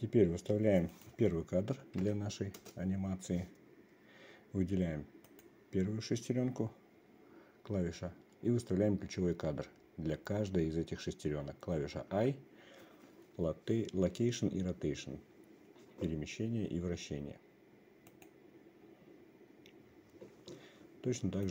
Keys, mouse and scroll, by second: 1.5-3.2 drag, 5.8 click, 12.6 i.